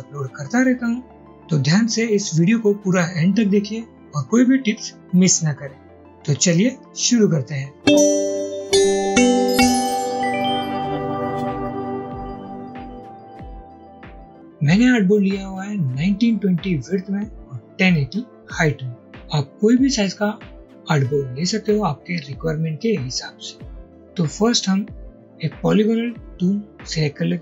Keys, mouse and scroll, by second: 0.2 scroll down 2, 0.3-0.9 scroll up 1, 2.0 click, 2.4 ctrl+y, 3.3 click, 3.5 alt+click, 3.8 alt+click, 4.0-5.1 typing, 4.5 click, 4.8 scroll down 1, 4.9-5.9 drag, 6.0 ctrl+y, 6.0 click, 7.1 scroll down 1, 7.2 scroll up 1, 7.7 alt+click.